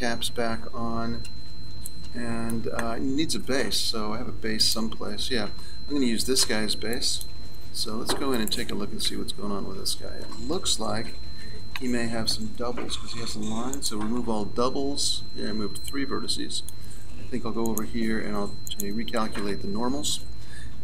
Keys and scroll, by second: 7.9 Tab, 9.1 Tab, 11.1 a.